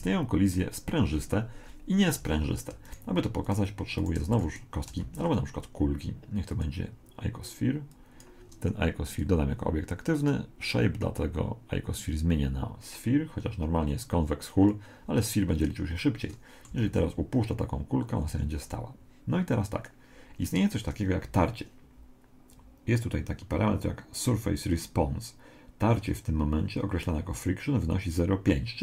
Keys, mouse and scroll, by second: 2.9-5.8 right drag, 4.3 x, 5.0 shift+a, 7.9-11.8 drag, 16.0-17.8 middle drag, 16.8 alt+a, 18.3 Escape.